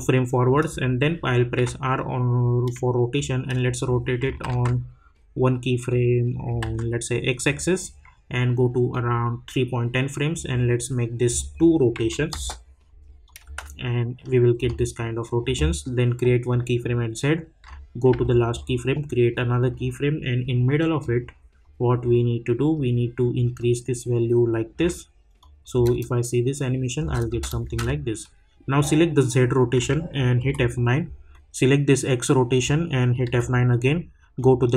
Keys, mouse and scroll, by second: 1.5 r, 3.1-4.5 drag, 4.5 ctrl+z, 5.9 click, 6.6 ctrl+z, 7.4-11.4 drag, 12.3 Return, 13.2 click, 14.7 space, 15.0-16.5 drag, 18.1 k, 19.6-25.4 drag, 25.7 space, 31.3-33.2 drag, 33.2 F9, 34.4-34.7 drag.